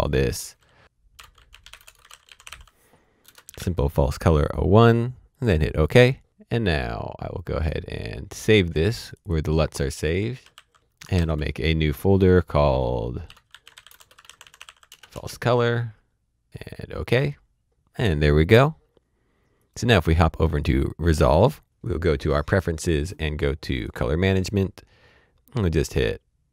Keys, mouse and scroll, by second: 1.1-3.5 typing, 5.3 click, 5.7 Return, 6.3-7.3 typing, 6.6 Return, 7.5 Return, 8.9-9.7 typing, 9.1 Return, 10.2 Return, 11.1 ctrl+shift+n, 13.2-14.6 typing, 14.9 Return, 16.5 KP_Enter, 19.6 click, 21.7 click, 23.7 click, 25.0-26.5 scroll down 1.